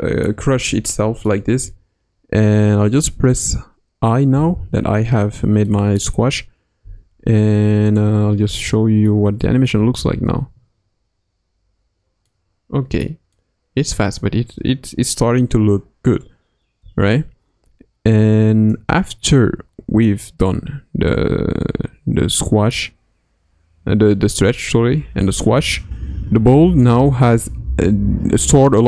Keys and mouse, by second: 0.5 KP_1, 1.2-1.7 middle drag, 4.3 i, 5.6-6.0 middle drag, 7.8 click, 8.7-9.1 shift+middle drag, 9.4 middle click, 9.8 space, 12.2-13.9 middle drag, 16.8 space, 18.7-26.8 drag.